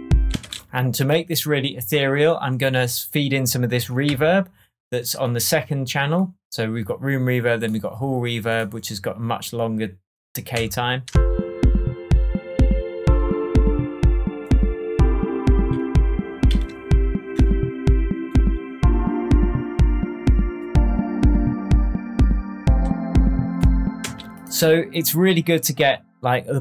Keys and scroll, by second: 0.2 space, 4.0 Tab, 10.5 Tab, 11.0 space, 16.4 super+s, 24.0 space.